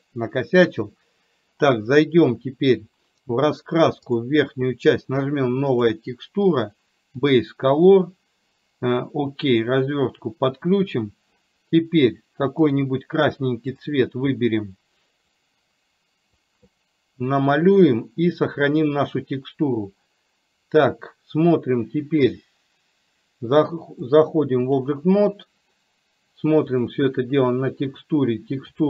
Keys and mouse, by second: 5.8-9.7 drag, 15.4-16.5 drag, 24.2 click.